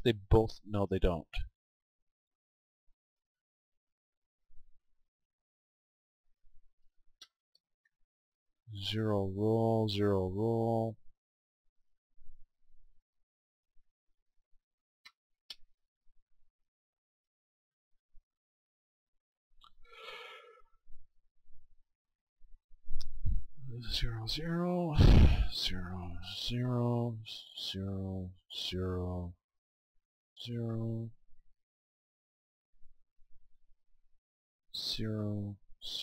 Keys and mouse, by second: 4.5-6.5 right drag, 6.0-8.7 drag, 11.5-13.4 right drag, 13.1-15.4 drag, 17.9-20.6 middle drag, 20.6-22.2 right drag, 25.0-28.1 right drag, 28.4-33.8 right drag, 34.5-36.0 right drag.